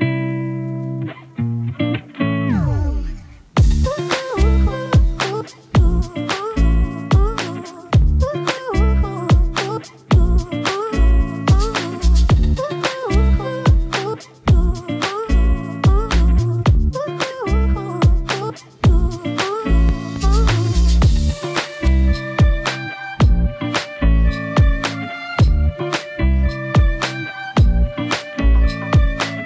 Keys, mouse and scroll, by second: 0.2 click, 4.1-5.1 typing, 4.3 click, 9.7-11.5 drag, 12.7-13.5 typing, 14.3-16.7 drag, 17.9-20.2 drag, 21.9-24.2 drag, 25.3 click, 26.1-27.2 drag.